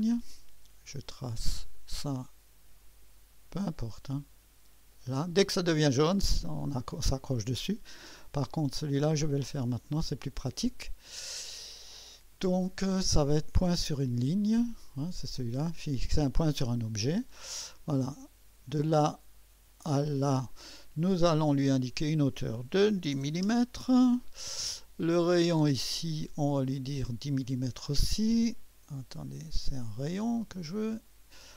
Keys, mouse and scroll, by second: 0.0 click, 1.7 click, 2.8 click, 4.9 click, 9.2 click, 10.0 click, 15.9 click, 18.7 click, 20.1 click, 21.7 click, 22.7-23.6 typing, 25.9 click, 29.1 click, 29.9 click, 30.7 click.